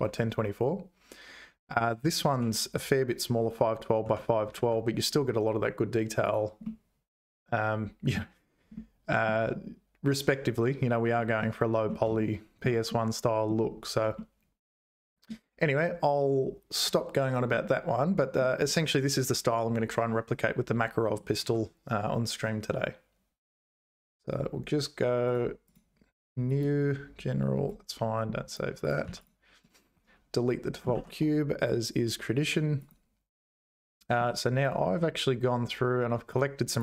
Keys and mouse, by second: 2.3 n, 4.0 n, 4.6 Tab, 6.2 click, 6.6-8.1 middle drag, 8.7 middle click, 11.1 middle click, 12.1 shift+click, 12.8 middle click, 14.1-15.3 middle drag, 17.5 middle click, 21.3 ctrl+w, 23.6-24.9 drag, 25.3-27.7 drag, 29.0 x, 29.9 `, 30.9 shift+a.